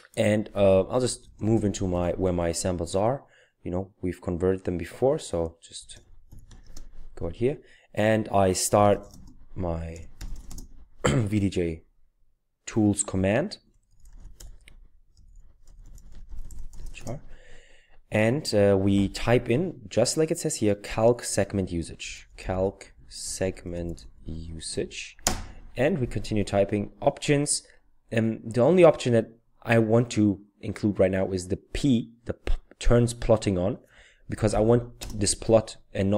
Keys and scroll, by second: 0.8-2.3 typing, 5.8-6.8 typing, 8.6-10.8 typing, 13.4-17.3 typing, 21.8-25.1 typing, 34.0-35.0 typing.